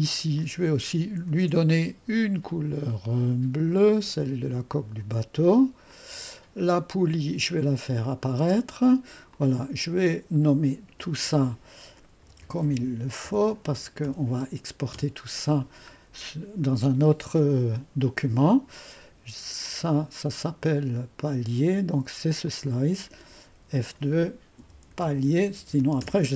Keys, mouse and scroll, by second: 0.3 click, 1.3 ctrl+d, 2.5 click, 3.7 click, 4.7 click, 5.9 click, 8.0 click, 8.4 space, 9.3 click, 10.8 F2, 11.9-14.5 typing, 14.9 Return, 15.9-16.9 scroll down 1, 19.6 click, 22.4 click, 24.3-26.3 typing.